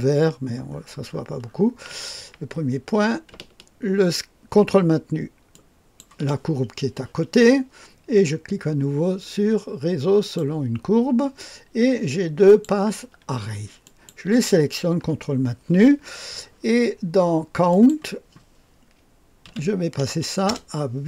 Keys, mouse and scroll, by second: 1.1-2.3 scroll down 2, 5.5 ctrl+click, 10.1 click, 12.4 click, 13.8 ctrl+click, 17.6 click, 19.4 KP_8, 20.4 Return.